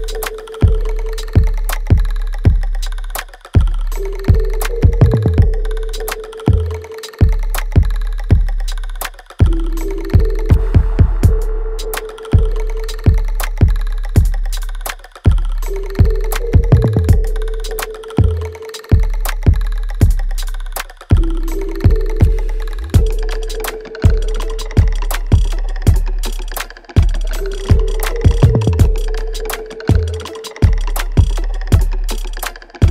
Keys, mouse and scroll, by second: 2.9 click, 3.5-8.4 shift+drag, 8.4 r, 9.0 click, 9.8 w, 10.1 click, 10.8 right click, 11.9 click, 12.1 alt+right click, 12.7 alt+click, 13.7 alt+right click, 14.4-15.9 alt+drag, 15.9 alt+right click, 16.5 alt+middle click, 17.0 alt+click, 17.9 alt+middle click, 18.3 alt+right click, 18.8 alt+middle click, 19.2-20.6 alt+right drag, 20.6 ctrl+s, 21.7 click, 23.5 right click, 24.6 alt+right click, 25.4 click, 28.6 alt+right click, 29.0 alt+click, 29.5 alt+middle click, 29.9 alt+right click, 30.6 shift+click.